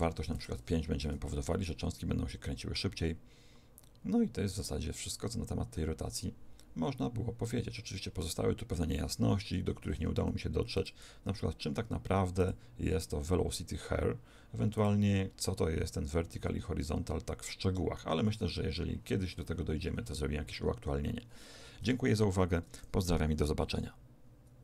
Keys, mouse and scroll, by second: 1.0 alt+a, 9.4 Escape, 10.6-14.2 drag.